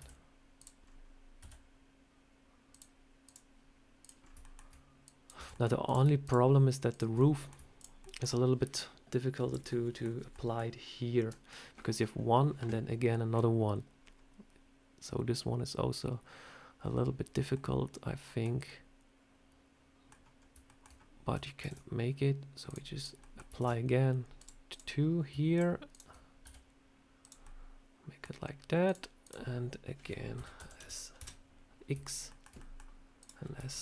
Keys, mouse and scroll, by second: 0.5 click, 0.7 scroll up 2, 1.3 s, 3.1 click, 3.9 click, 4.1 scroll up 2, 4.3 shift+middle click, 4.9 click, 5.2 Tab, 5.4 middle click, 5.7 click, 6.1 shift+click, 6.2 shift+click, 6.8 click, 7.1 middle click, 7.7 shift+click, 7.9 shift+middle click, 8.6 click, 9.6 middle click, 10.2 middle click, 13.0 middle click, 17.4 middle click, 18.5 middle click, 20.3 scroll up 1, 20.5 shift+middle click, 20.7 shift+middle click, 20.8-21.2 scroll up 1, 21.5 ctrl+r, 23.1 middle click, 23.5 ctrl+r, 25.4 shift+click, 25.8 shift+click, 26.3 s, 27.3 middle click, 28.7 click, 29.1 click, 30.2 s, 32.2 shift+middle click, 32.5 middle click, 33.1 click, 33.5 s.